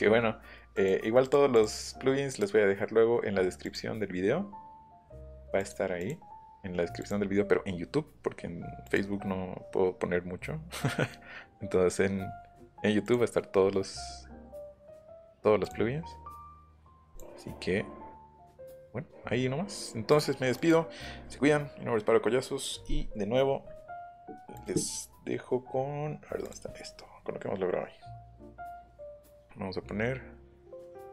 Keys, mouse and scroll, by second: 0.7 click, 1.2 click, 1.5 click, 2.3 click, 3.6 click, 5.1 click, 6.0 click, 7.0 click, 8.8 click, 13.0 click, 15.6 click, 17.1 click, 18.2 click, 20.1 click, 20.5 click, 24.5 click, 26.4 click.